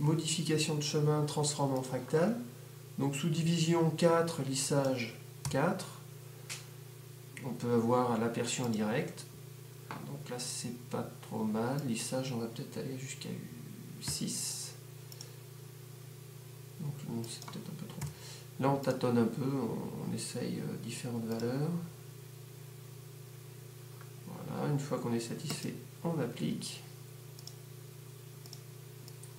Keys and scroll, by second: 5.7 4, 6.9 4, 14.4 6, 14.8 6, 18.3 5, 18.9 5.